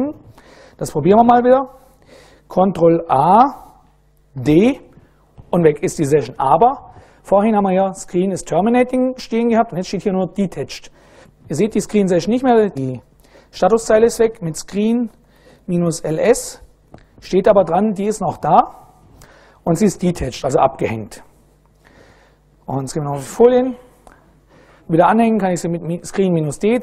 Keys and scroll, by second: 1.5 super+Right, 2.7 ctrl+a, 4.0 d, 14.2-16.5 typing.